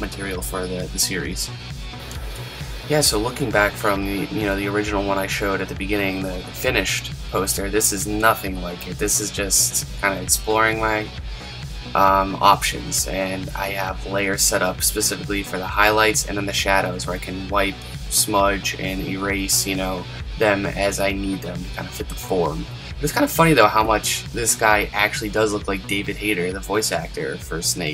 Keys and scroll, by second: 12.1 super+z, 13.0 super+z, 20.5 super+z, 23.3 super+z.